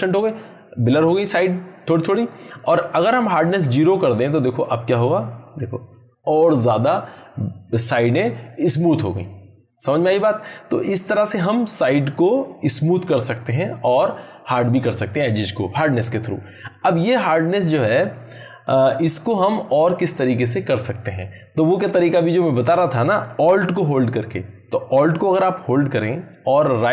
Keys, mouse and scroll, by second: 17.6 click, 21.0 click.